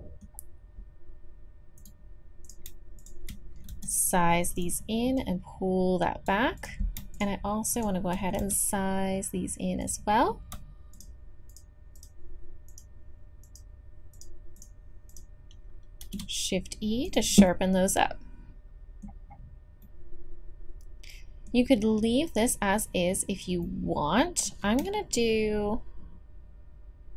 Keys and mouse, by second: 0.3-6.6 drag, 2.4-3.7 right drag, 3.7 s, 5.1 right click, 7.1-8.4 drag, 8.4 s, 9.1-10.9 drag, 16.0 shift+e, 17.1 click, 20.9 middle click, 21.0-25.7 middle drag.